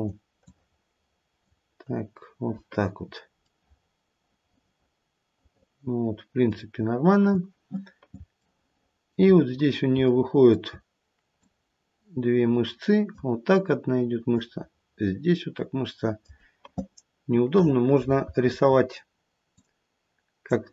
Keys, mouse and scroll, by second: 0.4 click, 8.4 shift+middle click, 8.6 shift+middle click, 9.4-9.8 scroll up 1, 10.0 shift+middle click, 10.6 shift+middle click, 11.4 click, 14.3 click, 19.5 click.